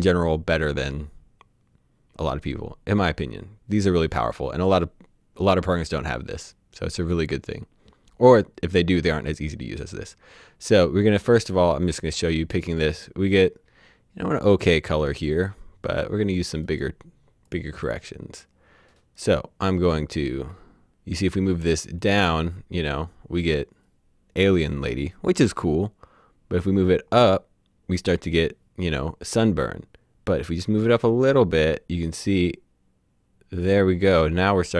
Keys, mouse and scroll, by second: 12.1 click, 15.1 right click, 17.5 click, 19.2 right click, 19.8 click.